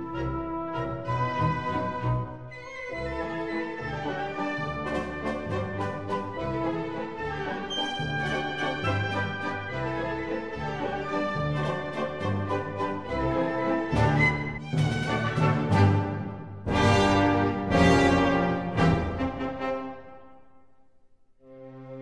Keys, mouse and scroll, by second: 1.1 x, 3.9-9.8 middle drag, 9.8-11.7 drag, 12.2-16.6 drag, 15.4 middle click, 16.0 right click, 17.1 s.